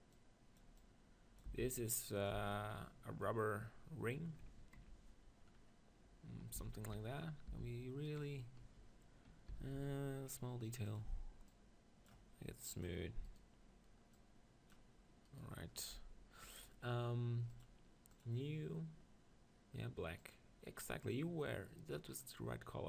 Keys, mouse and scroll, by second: 0.1-4.2 drag, 1.5 s, 2.3 z, 4.2 middle click, 6.5 s, 8.2-10.9 drag, 9.5 s, 10.9-22.1 drag, 13.3-15.1 right drag, 15.3-18.2 right drag, 22.3-22.8 right drag.